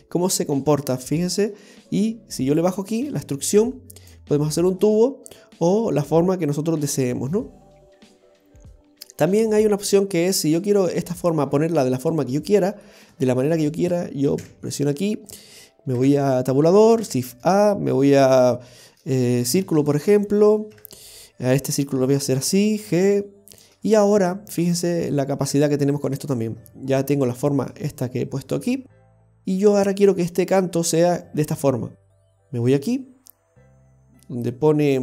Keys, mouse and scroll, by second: 4.4 click, 4.4 middle click, 5.0 scroll up 1, 5.5 middle click, 5.5 scroll up 4, 6.9 click, 11.5-11.9 scroll down 5, 12.3 middle click, 13.1 shift+middle click, 14.4 KP_7, 15.3 click, 16.0 Tab, 17.0 shift+a, 20.7 Tab, 21.8 right click, 22.8 g, 24.7 right click, 24.7 scroll down 2, 25.5 Tab, 25.9 right click, 26.2-26.9 scroll up 5, 27.1 middle click, 33.6-34.7 scroll down 2.